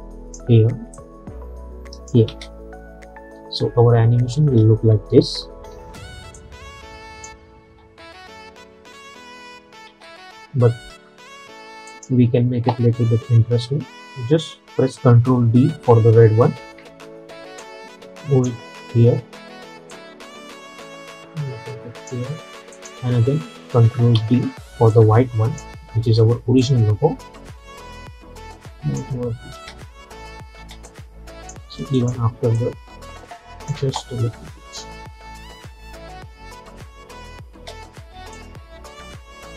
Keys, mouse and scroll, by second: 2.4 space, 4.5 space, 5.4 -, 5.6 -, 5.8 -, 6.4-7.8 drag, 7.8 space, 10.0 space, 12.0 click, 14.5 click, 16.7 ctrl+d, 17.7-22.8 drag, 24.2 ctrl+d, 25.0-29.6 drag, 29.6 space, 31.0-33.9 drag, 33.9 space, 38.1 space, 38.4-39.5 drag.